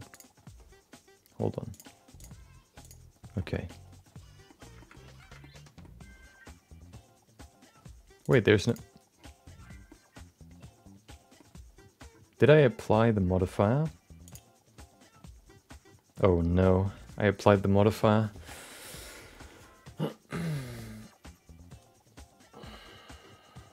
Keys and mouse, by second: 0.1 click, 1.7 click, 2.1 click, 3.4 shift+middle click, 3.5 middle click, 4.4 middle click, 4.8 shift+middle click, 5.4 middle click, 8.2 click, 8.7 click, 9.9-11.3 middle drag, 14.3 click.